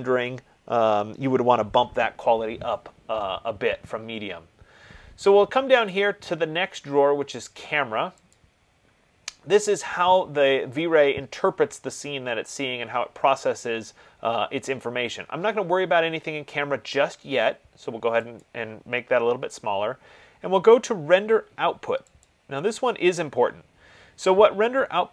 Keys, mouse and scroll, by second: 8.6 click, 18.7 click, 22.6 click.